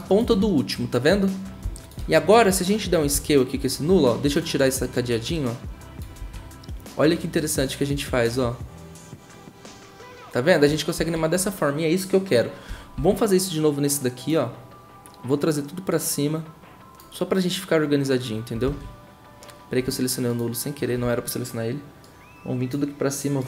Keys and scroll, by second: 1.6 s, 6.2 ctrl+z, 10.9 ctrl+z, 13.0 v, 18.6 ctrl+z.